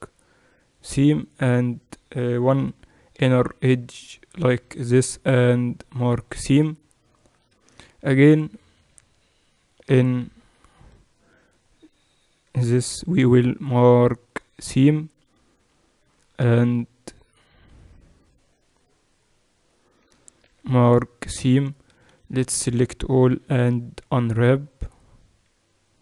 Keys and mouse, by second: 1.2-3.4 right drag, 2.4-3.8 typing, 4.8 ctrl+e, 7.3-9.0 typing, 10.3 z, 11.4-13.8 right drag, 12.8 ctrl+e, 16.0-17.5 drag, 17.5-20.3 middle drag, 20.3 ctrl+e, 20.3-21.8 right drag, 21.8 a, 22.0 a, 23.2 u.